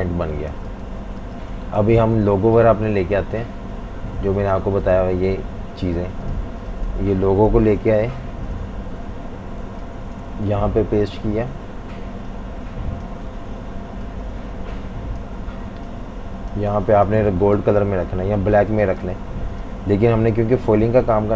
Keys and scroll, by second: 0.0-1.7 typing, 1.8 super+-, 2.0 super+-, 2.2 super+-, 7.5 super+c, 9.7 typing, 10.5 super+v, 11.3 typing, 17.3 v, 17.6 super+-, 17.7 super+-, 17.9 super+-, 18.4 typing, 20.3 i.